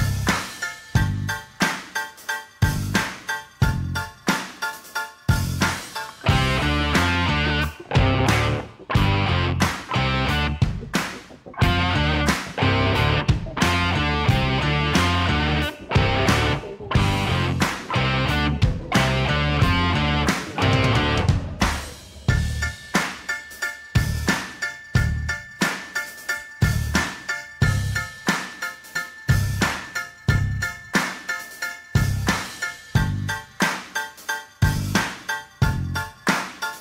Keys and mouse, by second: 0.4-2.3 middle drag, 2.5 shift+d, 2.9 g, 3.0 z, 4.5 shift+d, 5.1 g, 6.0 z, 6.1-7.3 middle drag, 7.7-8.6 drag, 9.8 KP_7, 10.7 g, 13.2 shift+middle click, 14.1 shift+middle click, 15.2 g, 18.2 s, 19.6-21.0 middle drag, 21.3 Tab, 22.0 2, 22.8 3, 23.2 click, 24.0 g, 26.7 drag, 26.8-27.7 middle drag, 27.8-28.1 shift+middle drag, 28.2-28.7 middle drag, 29.7 Tab, 30.3 shift+middle drag, 30.6-31.1 middle drag, 31.3 ctrl+a, 33.2 click, 33.8 click, 34.5-36.0 drag.